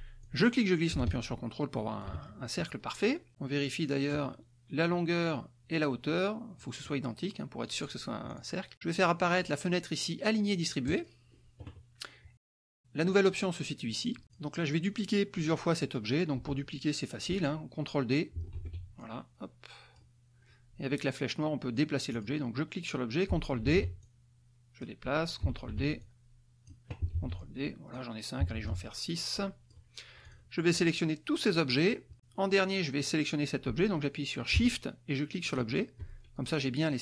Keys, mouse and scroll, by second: 0.9-2.8 drag, 3.7 click, 7.2 click, 8.3 click, 15.1 click, 19.4 ctrl+d, 19.8-21.0 ctrl+drag, 23.1 click, 24.5 ctrl+d, 25.0 ctrl+click, 26.6 ctrl+d, 26.9 ctrl+click, 28.0 ctrl+d, 28.3 ctrl+click, 29.5 ctrl+d, 29.7-30.8 ctrl+drag, 31.2 click, 31.7-32.7 drag, 36.4 shift+click.